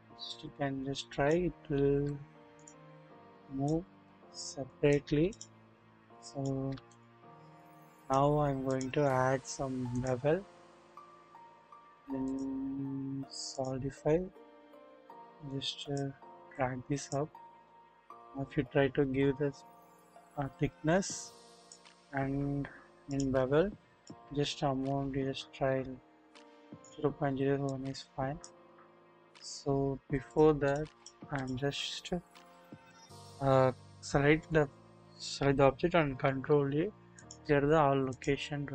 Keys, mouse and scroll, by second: 0.3-1.3 drag, 1.9 ctrl+z, 3.3 click, 3.8 ctrl+z, 4.0 ctrl+z, 4.7 click, 6.2 click, 7.6 click, 10.0 click, 11.7 click, 13.6 click, 15.4 click, 16.5-17.1 drag, 18.3-21.7 drag, 23.1 click, 24.1-26.8 drag, 27.7 click, 28.7-29.2 scroll up 1, 29.2-30.3 scroll down 1, 30.3-30.7 drag, 36.3 ctrl+a, 38.2 click.